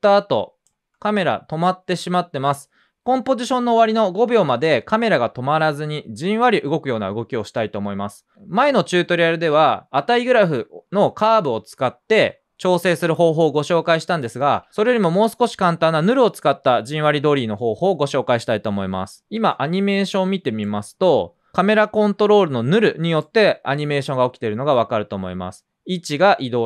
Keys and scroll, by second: 0.7 space, 17.1 typing, 19.4 typing.